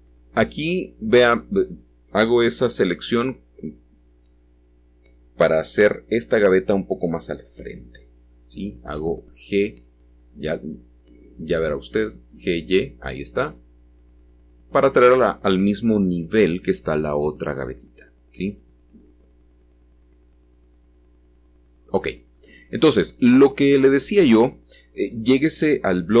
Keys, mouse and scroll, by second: 4.1-5.2 scroll up 1, 5.2-8.2 shift+middle drag, 8.6-9.7 drag, 10.2-10.8 scroll down 1, 10.8 scroll down 1, 10.9-12.8 middle drag, 12.9 g, 15.6 shift+click, 16.1-17.2 scroll down 1, 17.2-26.2 middle drag, 20.3 scroll down 1.